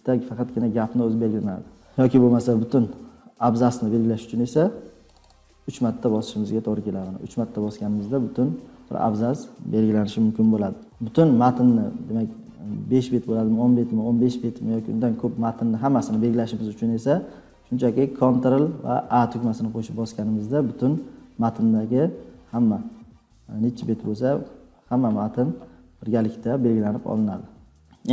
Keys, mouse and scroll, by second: 1.7 click, 5.0 click, 5.1 click, 5.2 click, 10.8 click, 11.6-12.7 scroll down 12, 13.3 scroll down 6, 13.4-15.5 scroll, 16.0 scroll, 19.0 ctrl+a, 22.7-23.0 ctrl+scroll, 23.7-25.8 scroll, 27.8 ctrl+scroll.